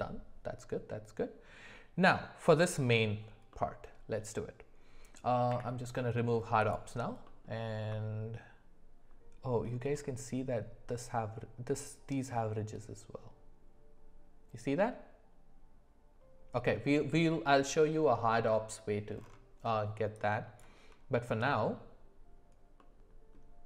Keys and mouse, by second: 3.5-4.1 middle drag, 5.5 w, 7.3 middle click, 22.8 middle click.